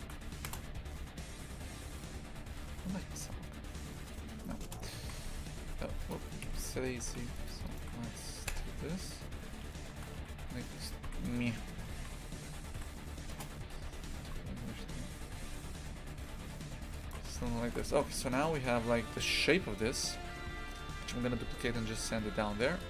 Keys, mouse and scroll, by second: 0.5 KP_0, 4.7 KP_0, 5.0 shift+f, 6.5 KP_Decimal, 7.1 shift+f, 7.7 alt+shift+right click, 8.5 KP_0, 9.5 g, 11.4 g, 13.8 g, 17.3 Tab.